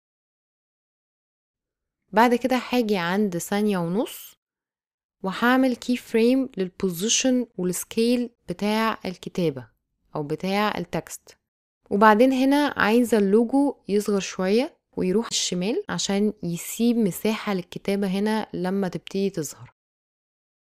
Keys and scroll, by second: 6.2 s, 8.3 p.